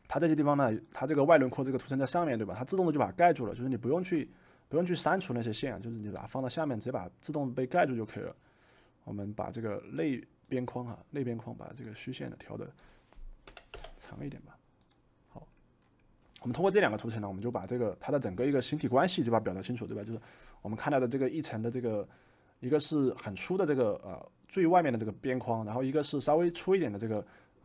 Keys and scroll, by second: 13.4 4, 13.6 Return.